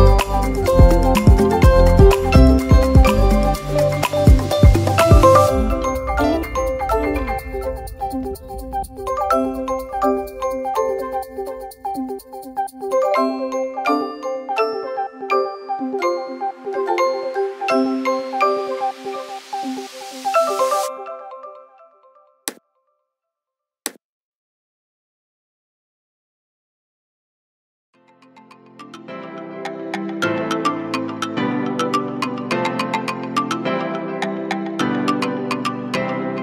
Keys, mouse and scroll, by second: 4.8 ctrl+z, 5.4 ctrl+z, 34.7 scroll up 2.